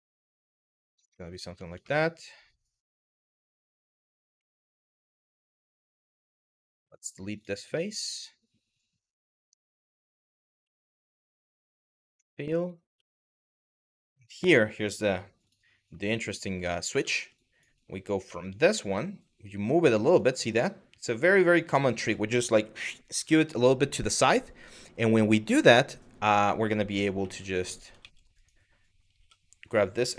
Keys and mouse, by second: 0.8 shift+middle click, 1.4 shift+middle click, 4.0 3, 4.4 click, 5.1 ctrl+z, 5.5 w, 5.8 click, 6.5 x, 7.4 shift+middle click, 9.4 click, 10.4 2, 11.6 f, 14.0 click, 15.0 click, 16.7 1, 17.0 click, 17.9 g, 19.7 click, 26.8 e, 27.6 ctrl+z, 28.8 2, 29.2 click, 29.9 e.